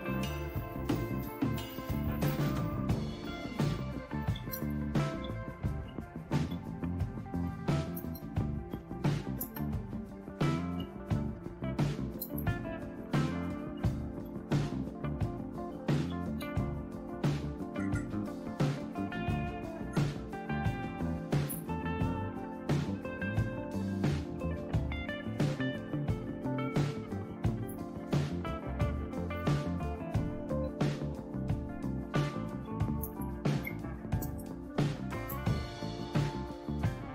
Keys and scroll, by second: 2.3 Return, 2.6 Return, 3.6-16.9 typing, 22.8 Return, 25.2 Down, 25.3-28.1 Down, 28.1 Up, 28.3 Up, 28.5 Up, 28.7 Up, 29.4 Return, 29.6 Return, 30.6 Up, 32.6-37.0 typing.